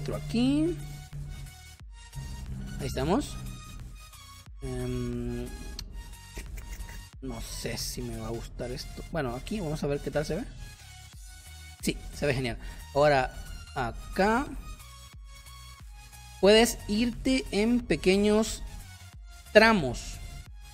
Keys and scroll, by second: 2.5 space, 11.9 space, 18.3 space.